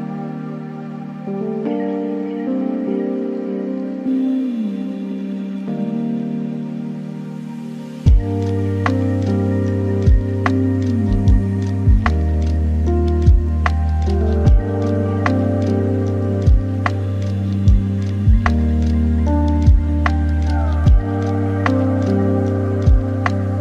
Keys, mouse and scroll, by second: 0.6-2.5 middle drag, 2.5 g, 4.5 shift+d, 7.5 r, 11.8-13.6 drag, 13.6 KP_0, 15.3 click, 16.3-17.5 drag, 17.5 KP_0, 19.5 shift+a, 22.2 n.